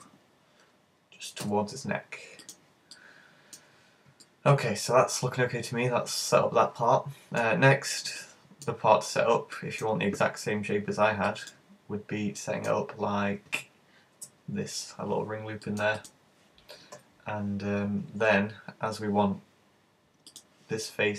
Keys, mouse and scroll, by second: 0.0 g, 2.6 click, 2.9 middle click, 3.9-4.2 scroll down 3, 4.2 middle click, 7.5-8.2 scroll up 2, 8.2 middle click, 8.9-9.5 scroll down 4, 9.6 middle click, 9.9-10.5 alt+scroll up 1, 10.5-11.2 scroll up 1, 11.2 scroll up 1, 11.4 shift+middle click, 11.7-12.1 scroll up 4, 12.4 shift+middle click, 12.8-13.5 scroll down 5, 14.2 ctrl+r, 16.1 click, 16.9-17.7 scroll up 4, 20.4 click.